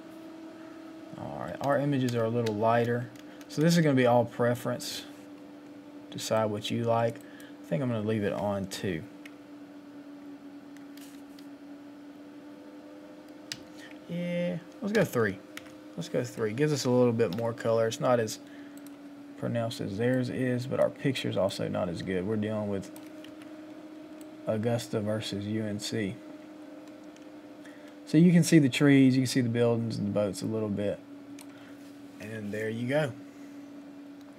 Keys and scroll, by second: 11.1 Up.